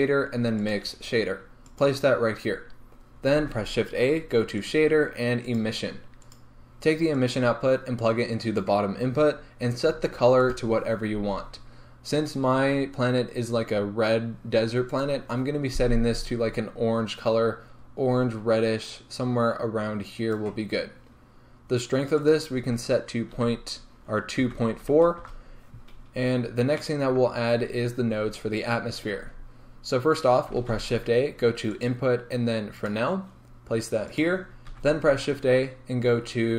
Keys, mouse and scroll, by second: 2.0 click, 3.6 shift+a, 8.7 click, 10.5 click, 25.3-36.5 drag, 25.4 Return.